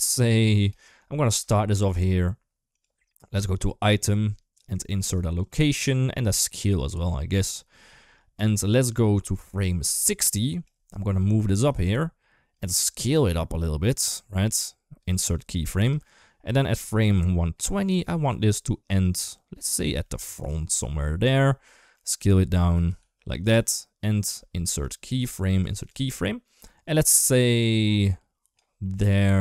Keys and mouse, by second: 0.7 middle click, 1.7 g, 3.4 click, 3.9 click, 4.9 right click, 6.4 right click, 7.4 middle click, 8.7 click, 10.1 click, 10.8 middle click, 11.5 g, 12.6 s, 14.5 right click, 15.5 right click, 16.8 click, 18.3-19.6 drag, 19.9 middle click, 20.5 g, 21.5 middle click, 22.0 s, 22.7 g, 23.5 right click, 24.5 right click, 25.6 right click, 26.9-28.4 drag, 28.8 middle click.